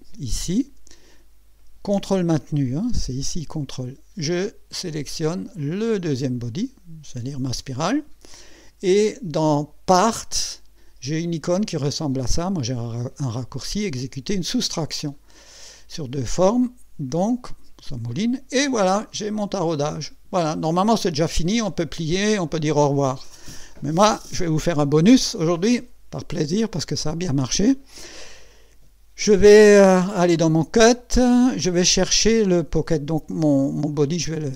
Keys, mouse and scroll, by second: 6.5 ctrl+click, 15.0 click, 19.2-21.9 drag, 26.9 click, 30.5 click, 31.2 click, 33.9 click, 34.4 space.